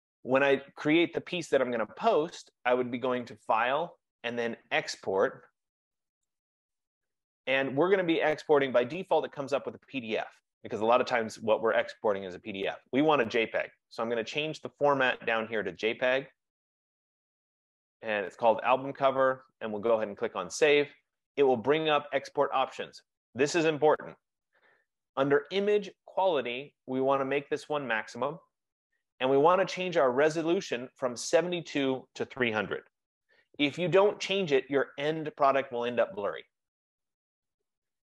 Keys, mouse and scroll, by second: 3.6 click, 6.5 click, 8.7 F15, 12.7 click, 16.5 click, 20.5 click, 26.8 click, 28.3 click, 32.6-33.5 typing.